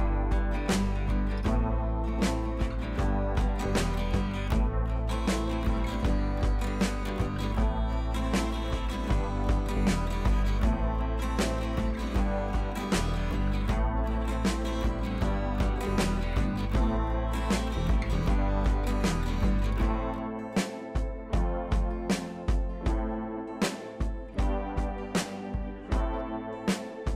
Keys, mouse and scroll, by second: 0.0 scroll down 1, 0.2 space, 0.4 scroll up 1, 1.9 click, 2.3 scroll up 1, 2.6-6.7 drag, 6.7 ctrl+z, 7.1-10.4 drag, 10.4 scroll down 1, 14.2 ], 14.5 right click, 14.9 click, 15.3 ], 15.4 ], 15.7 ], 16.3 click, 20.1-20.6 typing, 20.2 scroll up 1, 20.7 click, 21.2 scroll up 1, 22.3 click, 23.0 ], 23.3 click, 25.4 scroll up 1, 26.0-27.1 drag.